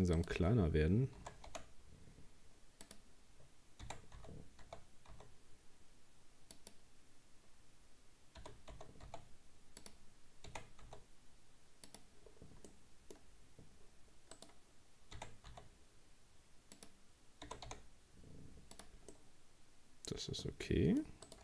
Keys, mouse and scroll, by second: 0.2 shift+right click, 1.2 s, 3.8 r, 8.4 g, 10.5 r, 12.3-12.7 scroll down 2, 12.7 middle click, 13.2-13.9 scroll up 2, 14.4 right click, 15.2 r, 17.5 g, 19.1-21.3 middle drag, 21.3 right click.